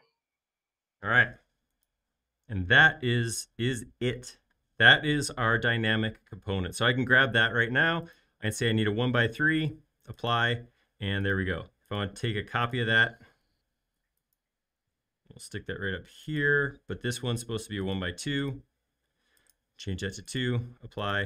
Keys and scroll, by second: 13.2 m.